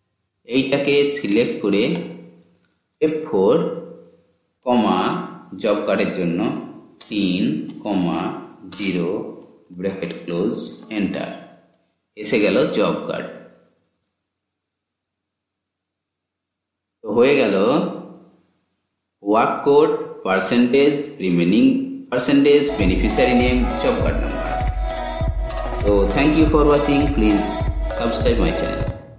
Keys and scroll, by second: 3.1 F4.